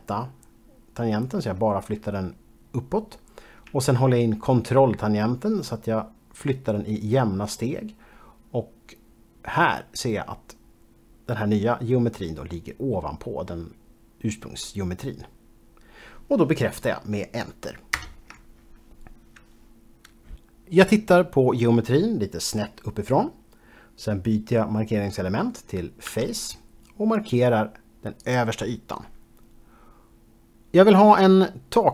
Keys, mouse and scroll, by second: 18.0 ctrl+Return, 21.3 middle click, 26.2 3, 28.4 click.